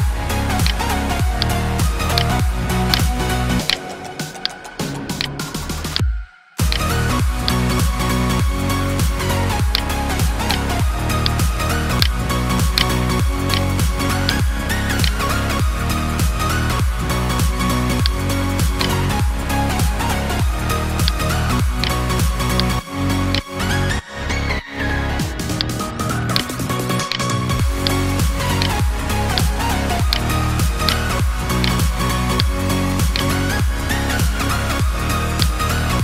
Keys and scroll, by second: 2.0 space, 4.8 space, 9.9 space, 13.6 space, 25.1 space, 31.2 space.